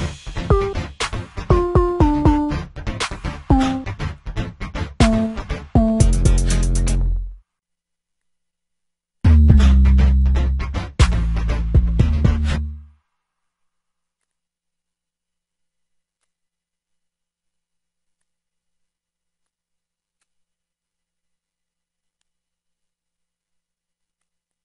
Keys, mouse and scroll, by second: 9.7-10.4 drag.